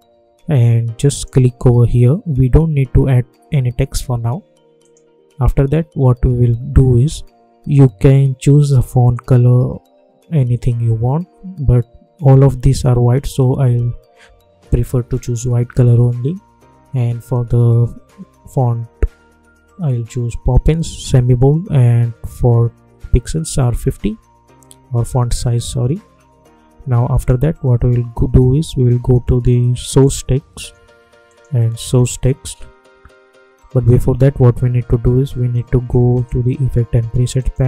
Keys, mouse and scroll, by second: 4.7 click, 27.1 click, 27.1 click, 29.8 click, 36.1 click.